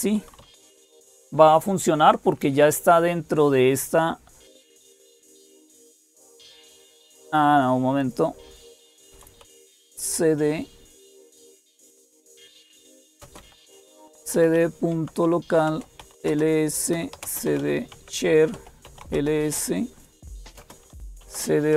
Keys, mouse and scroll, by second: 0.0-21.7 typing, 7.8 click, 10.8 Return, 18.3 Tab, 18.9 Return.